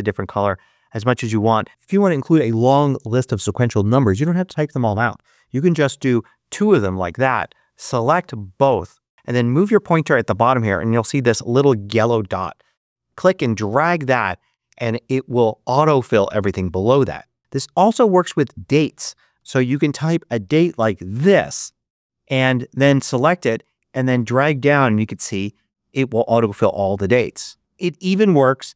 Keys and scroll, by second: 6.5 Return, 18.9-21.2 typing, 28.3-28.7 typing.